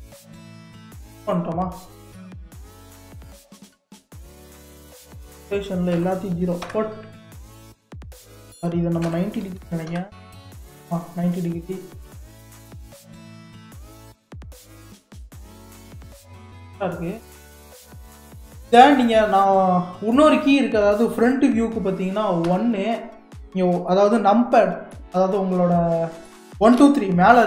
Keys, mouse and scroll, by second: 1.3 click, 2.7-7.3 drag, 8.3-16.8 drag, 16.8-19.5 middle drag, 19.5-20.9 scroll down 2, 22.5 KP_1, 24.9-27.4 middle drag.